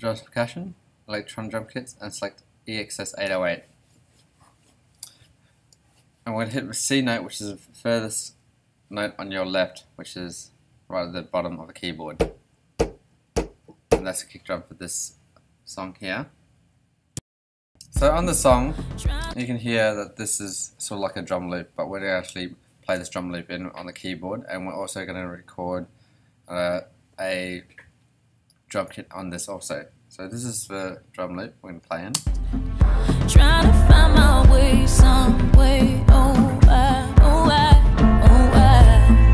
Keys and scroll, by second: 17.8 space, 30.7 ,, 32.1 space.